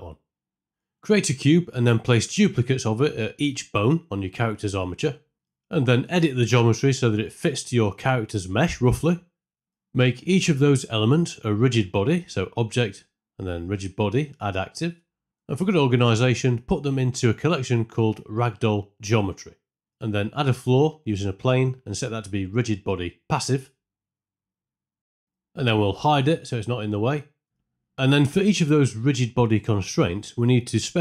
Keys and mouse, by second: 0.3 click, 1.2-3.2 typing, 4.1 shift+click, 4.3-7.6 typing, 4.4 Return, 4.4 click, 4.8 right click, 5.7 ctrl+r, 5.9 shift+click, 6.5 shift+click, 6.8 ctrl+r, 7.6 click, 8.0 click, 8.2 ctrl+l, 8.4 right click, 8.5 Tab, 8.7 ctrl+z, 8.9 p, 9.3 ctrl+z, 9.4 ctrl+z, 9.4 right click, 11.9-15.0 drag, 20.1 shift+click, 20.6 shift+click, 20.9 space, 21.0 space, 21.0 shift+Left, 21.3 middle click, 21.4 click, 21.7 shift+a, 22.0 s, 22.9-23.7 drag, 23.8 space, 24.2 space, 24.3 shift+Left, 26.2 KP_3, 26.2 KP_Decimal, 26.9 click, 29.4 click.